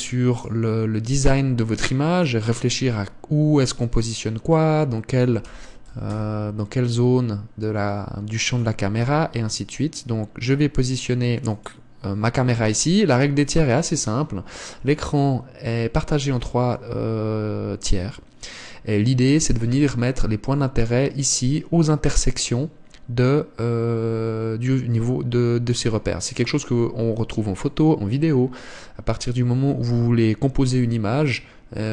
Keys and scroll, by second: 1.6 g.